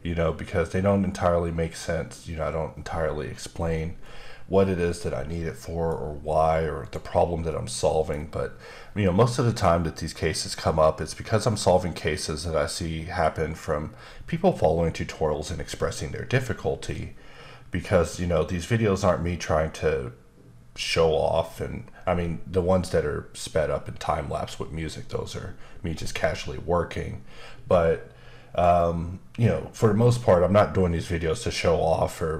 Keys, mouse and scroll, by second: 4.0 middle click, 6.8 click, 7.4 middle click, 11.5 middle click, 15.6 middle click, 28.7 middle click, 32.0 scroll up 1.